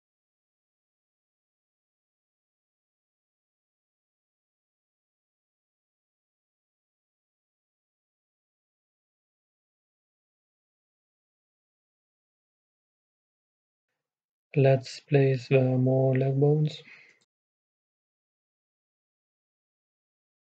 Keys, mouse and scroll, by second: 1.3 s, 3.3-13.0 drag, 13.0 middle click, 13.9-15.8 drag, 15.8-17.5 right drag, 18.0-20.0 right drag, 18.7 r.